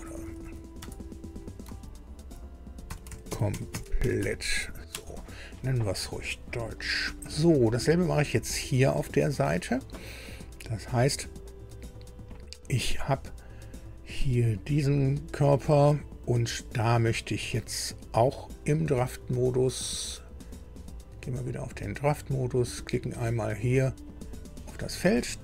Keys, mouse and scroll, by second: 0.0-0.7 typing, 2.6-4.6 typing, 4.9 Return, 6.3 scroll down 2, 6.7 shift+middle click, 11.2 scroll up 2, 13.6 scroll down 2, 14.4 click, 17.5 click, 19.4 click, 21.1 click, 24.0 click.